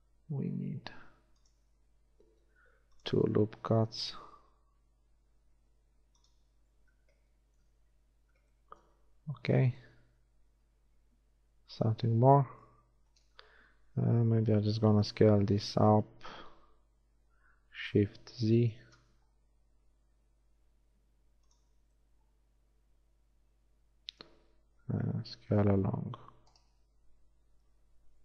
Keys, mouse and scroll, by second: 2.3 ctrl+r, 7.0 z, 8.4 z, 9.8 Tab, 14.2 a, 15.4 l, 17.4 s, 22.0 Tab, 24.7 Tab, 25.6 a.